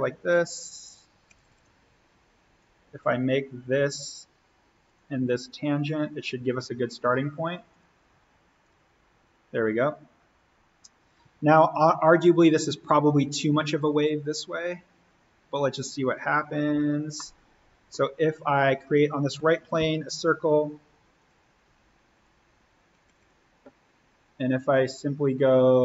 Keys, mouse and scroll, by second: 1.2 Escape, 2.5-4.8 drag, 7.7 click, 8.9-9.5 scroll up 1, 10.1-10.6 scroll down 1, 14.3 click, 16.7 v, 17.1-18.6 middle drag, 18.6 click, 19.3 alt+s, 19.7 o, 21.1 click, 22.9 Escape, 24.8 click.